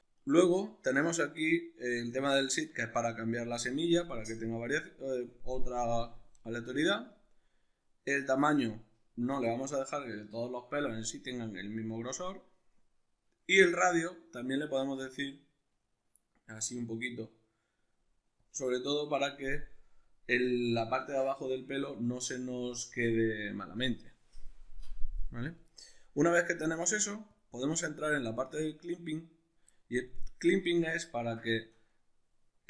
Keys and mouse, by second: 25.8-27.3 middle drag, 27.3-27.7 drag, 27.7-32.6 middle drag.